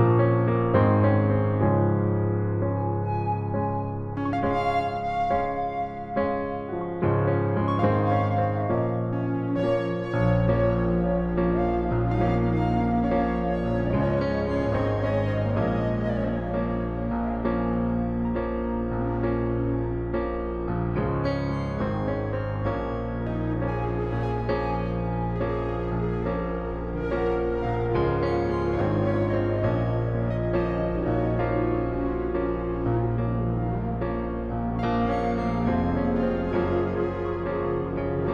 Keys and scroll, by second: 5.6 ctrl+t, 11.2 shift+Return, 20.9 ctrl+t, 25.8 alt+shift+Return.